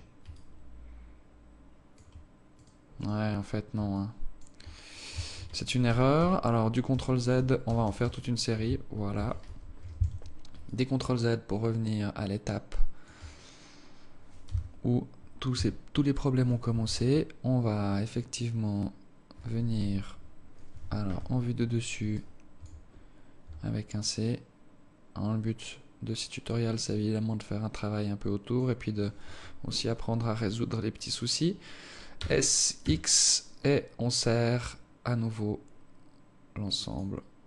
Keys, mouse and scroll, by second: 0.4 alt+click, 2.6 right click, 3.0 right click, 4.0 alt+click, 5.6 ctrl+z, 6.0 ctrl+z, 6.4 ctrl+z, 7.0 ctrl+z, 7.4 ctrl+z, 7.8 ctrl+z, 8.0 ctrl+z, 8.1 ctrl+z, 9.5 ctrl+shift+z, 10.2 Tab, 10.7 alt+click, 14.5 z, 15.8 c, 21.2 KP_7, 22.2 alt+shift+click, 23.0-23.3 scroll down 3, 23.3 scroll up 1, 23.5 c, 29.7 scroll up 2, 30.0 scroll down 1, 32.2 s.